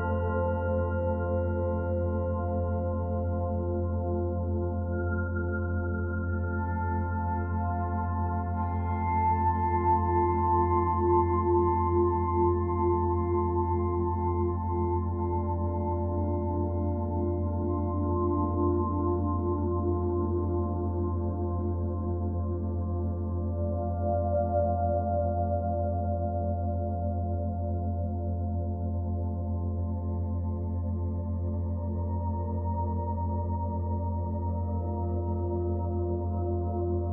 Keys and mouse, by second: 0.0-0.3 typing, 0.4 click, 1.6-3.9 drag, 5.4 typing, 14.9 click, 17.2 click, 18.2 click, 18.9-21.6 alt+drag, 21.4 Tab, 22.0-26.9 ctrl+alt+drag, 27.9 e, 28.8 Return, 29.8 s, 30.7 Escape, 31.6 ctrl+z, 32.1 ctrl+z, 33.7 click, 34.4 click, 35.6 click, 36.7 click.